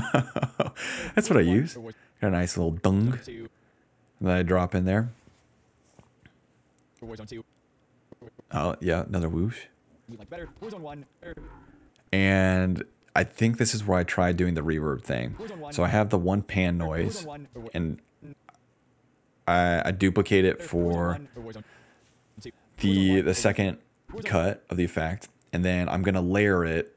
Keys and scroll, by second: 0.9 space, 1.8 space, 3.5-4.5 typing, 6.9 space, 7.3 space, 7.5 d, 9.6-11.0 typing, 15.2-17.7 typing, 19.3-22.2 typing, 21.7 ctrl+z, 23.4 space, 23.8 space, 24.3 space, 25.8-26.9 typing.